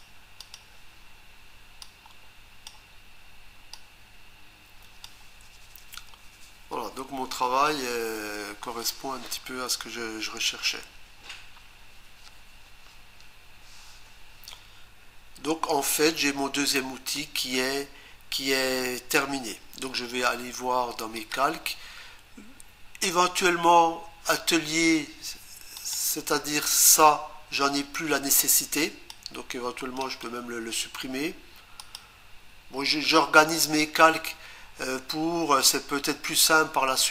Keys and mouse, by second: 0.4 click, 1.8 click, 3.8 click, 21.2 click, 25.8 click, 28.8 click, 30.0 right click, 31.8 click.